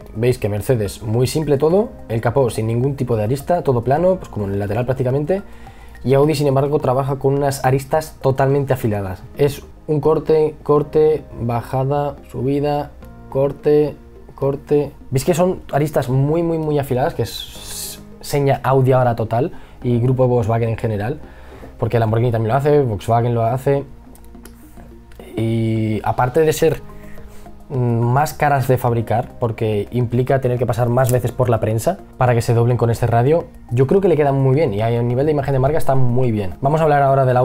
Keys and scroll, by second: 23.8 e, 25.0 b.